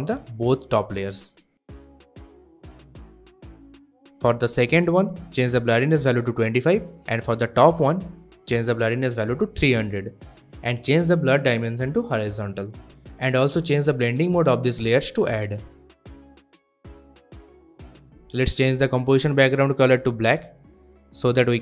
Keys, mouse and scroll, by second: 0.4 click, 0.9-2.0 typing, 3.0 click, 5.8-6.2 typing, 6.3 Return, 7.6 click, 9.2-10.3 typing, 11.2 click, 18.7 click, 19.1 ctrl+k, 20.0-21.1 drag.